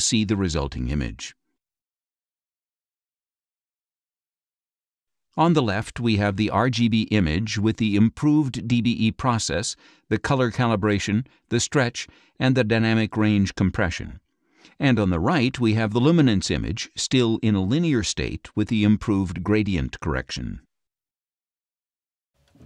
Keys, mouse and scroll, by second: 3.5-4.6 drag, 5.6 click, 15.2 click.